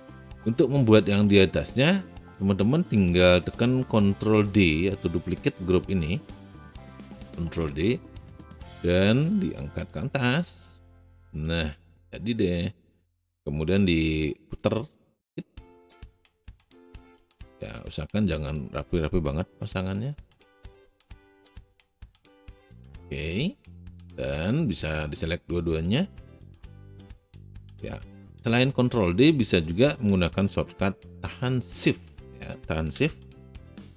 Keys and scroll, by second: 7.3 ctrl+d, 26.8 w.